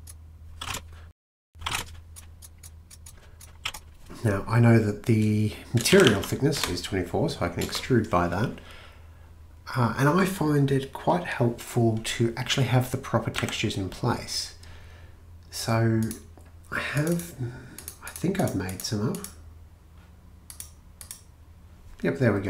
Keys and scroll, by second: 0.6-2.1 typing, 3.2-3.6 typing, 5.7-7.9 typing, 11.6 typing, 13.4 a.